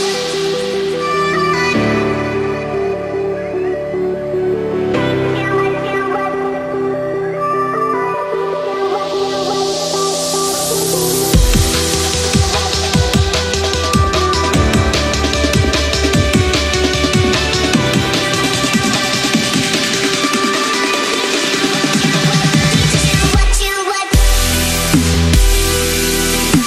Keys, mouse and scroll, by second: 1.5 space, 1.6 click, 1.8 space, 2.9 ctrl+=, 3.8 click, 6.4 ctrl+-, 6.9 space, 7.0 click, 7.3 space, 7.9 click, 11.4 right click, 12.2 click, 18.8 ctrl+a, 20.0 click, 24.0 right click, 25.1 click.